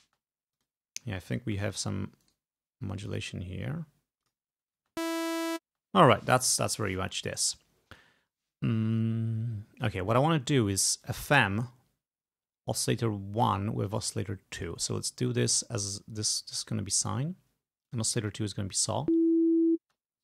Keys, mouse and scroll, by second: 0.1 space, 0.6 click, 1.5 space, 2.3 right click, 4.3 click, 4.8 space, 5.7 space, 11.0 click, 14.7 click, 17.0 click, 18.0 click, 19.0 space, 20.0 space.